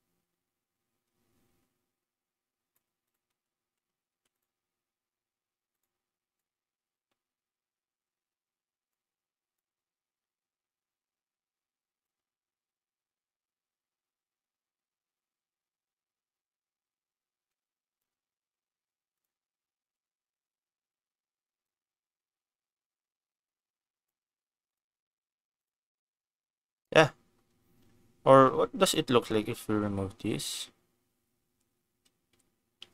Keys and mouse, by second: 3.0 click, 3.3 Tab, 3.6 Tab, 4.0 ctrl+s, 4.3 click, 8.8 click, 12.0 shift+click, 12.9-18.0 shift+middle drag, 19.1 click, 19.8 ctrl+s, 21.6-24.1 shift+drag, 24.7 click, 25.2 ctrl+s, 25.5 click, 28.8 click, 31.9 ctrl+z, 32.8 ctrl+s.